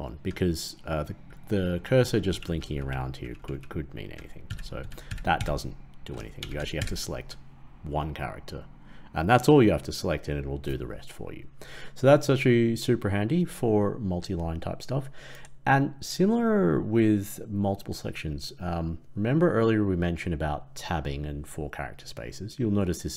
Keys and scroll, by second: 4.4 ctrl+/, 4.7 ctrl+/, 5.0 ctrl+/, 5.3 ctrl+/, 6.7 ctrl+/.